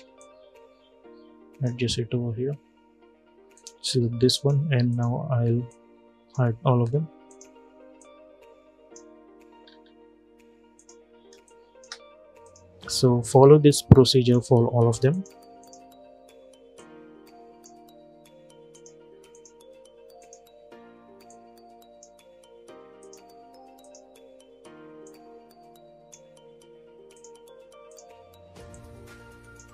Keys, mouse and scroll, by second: 9.3 scroll down 1, 10.5 click, 11.0 space, 11.1 click, 11.5 space, 12.1-29.7 drag.